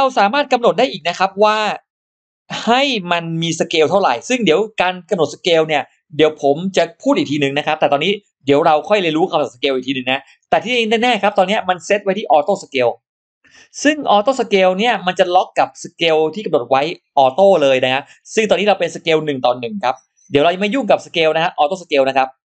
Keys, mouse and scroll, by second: 0.2 click, 13.4-14.0 scroll down 4, 14.6 click, 15.0-15.3 scroll up 2.